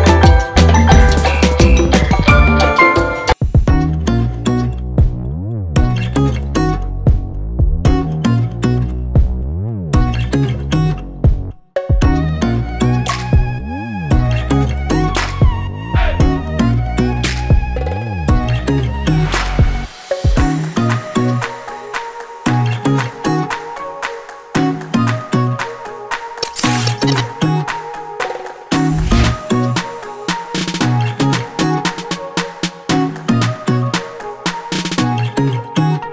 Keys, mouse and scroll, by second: 2.6 click, 3.1-3.5 scroll down 1, 3.5 scroll up 1, 4.2 ctrl+click, 6.7 9, 10.4 click, 10.7 scroll down 1, 11.6 scroll up 1, 12.5 scroll up 1, 13.4 ctrl+click, 14.6 double click, 15.5 ctrl+click, 16.5 ctrl+r, 16.8 click, 17.3 scroll up 1, 20.0 scroll down 1, 20.3 click, 20.7 scroll down 1, 21.2 scroll up 1, 22.5 ctrl+r, 22.9 scroll down 1, 23.5 scroll up 1, 26.1 click, 26.6 click, 28.2 ctrl+click, 29.8 scroll down 1, 30.2-30.6 scroll up 1, 32.5 scroll down 1, 35.1 click, 35.3 double click.